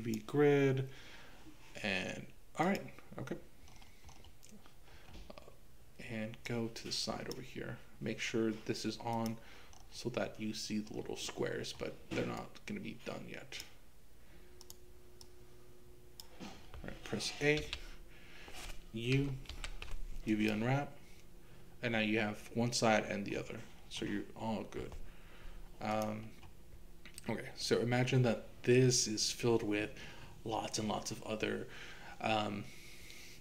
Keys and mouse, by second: 6.4-7.4 drag, 9.7 click, 12.4-13.7 drag, 15.3 click, 17.6 a, 19.5 u, 25.9 click.